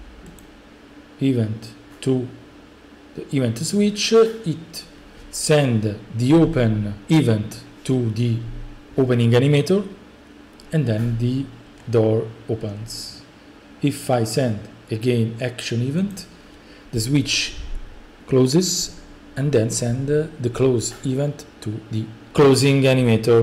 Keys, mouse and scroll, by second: 0.1 click, 16.1 click.